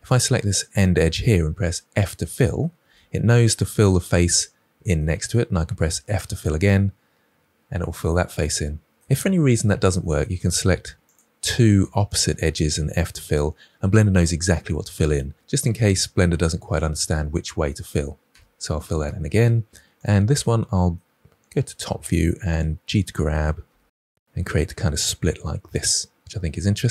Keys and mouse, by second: 0.0 click, 2.8 f, 6.0 f, 8.6 middle click, 9.2 ctrl+z, 9.5 ctrl+z, 10.1 middle click, 11.0 click, 13.0 f, 15.2-17.8 middle drag, 18.2 f, 19.0 middle click, 21.8 KP_7, 23.6 g, 25.6 click.